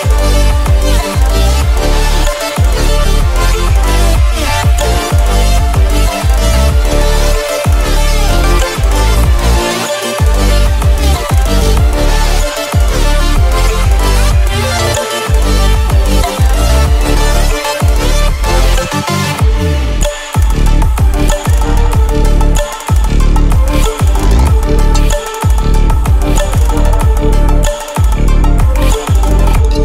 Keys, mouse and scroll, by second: 2.2 click, 2.5 scroll up 1, 3.2 alt+scroll down 1, 4.1-5.0 scroll up 1, 5.0 m, 8.8 ctrl+z, 8.9-15.9 drag, 17.1 alt+scroll up 1, 19.3-20.7 drag, 20.7-21.5 alt+scroll down 3, 22.3-23.0 alt+scroll up 2, 25.0-27.7 drag, 27.7 alt+scroll down 1, 28.5 alt+scroll up 1.